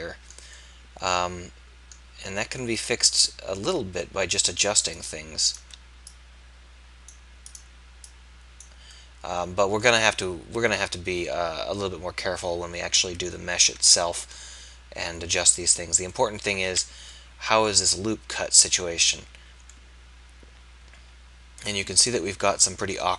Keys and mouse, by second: 2.9-6.1 drag, 6.1 middle click, 9.1-10.2 middle drag, 13.5-16.6 middle drag, 16.6 z, 20.2-23.1 middle drag.